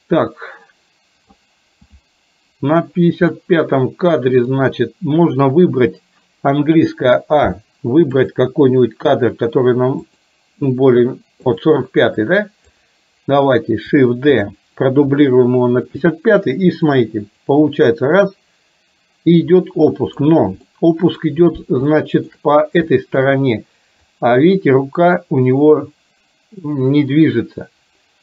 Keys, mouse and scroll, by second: 3.3-4.6 middle drag, 7.0 a, 8.3 click, 10.2 click, 11.6 click, 12.5-12.8 drag, 14.5 shift+d, 17.0 click, 17.6-20.3 drag, 20.8-21.2 middle drag, 22.0 shift+middle click, 23.0 shift+middle click, 24.2-28.2 drag.